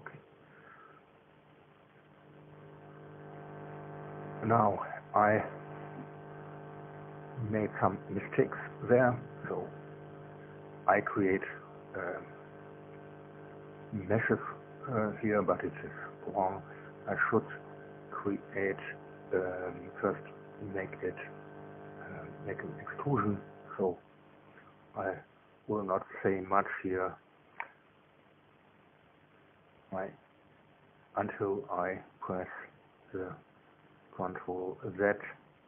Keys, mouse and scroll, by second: 0.4 Tab, 3.4-6.5 shift+middle drag, 6.0 Tab, 6.5 right click, 9.4 alt+c, 10.5 click, 11.2 right click, 12.5 alt+c, 14.0 click, 16.9 right click, 18.0 Tab, 26.9 click, 28.6 a, 30.4 click, 31.4 click, 35.0 click.